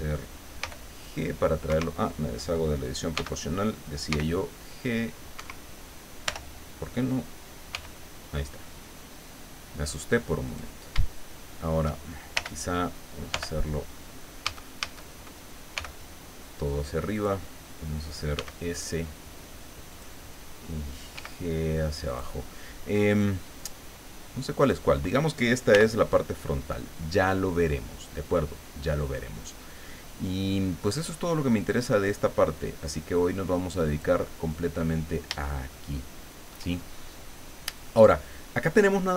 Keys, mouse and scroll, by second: 0.6 g, 1.7 Escape, 3.1 g, 4.1 g, 5.3 Escape, 6.2 o, 7.7 g, 10.4 click, 12.3 l, 13.3 l, 14.4 a, 15.7 g, 17.1 click, 18.3 s, 19.9 click, 21.1 g, 22.0 click, 24.6 right click, 25.7 l, 33.4 click, 35.4-36.7 shift+drag.